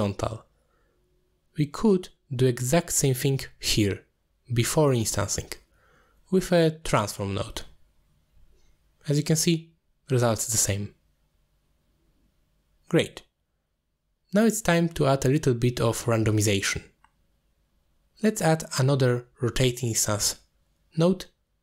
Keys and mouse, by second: 2.7 click, 3.1 m, 3.5 click, 4.2 click, 4.7 click, 5.6 shift+a, 8.3 click, 9.1 click, 10.4-10.9 middle drag, 11.5 middle click, 12.2 m, 12.3 middle click, 12.6 click, 12.7 m, 13.1 m, 13.7 m, 14.1 click, 14.3 ctrl+x, 14.8 click, 16.8 click, 18.1-18.5 drag, 19.2 g, 19.5 click, 20.0 click, 20.6 shift+d.